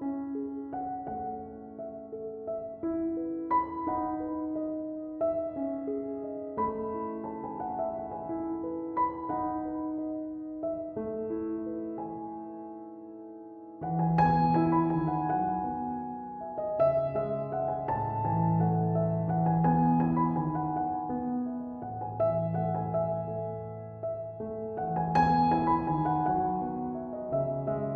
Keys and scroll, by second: 7.2 BackSpace.